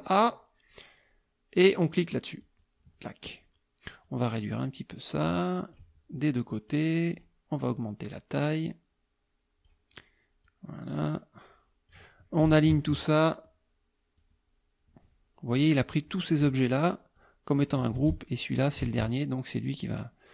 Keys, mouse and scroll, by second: 2.4 click, 4.0-5.9 drag, 6.7 click, 8.1-9.9 drag, 10.4-12.1 drag, 12.5 shift+click, 14.2 click, 15.6 click, 16.3 shift+click, 16.8 shift+click, 17.2 shift+click, 17.6 shift+click, 18.6 shift+click.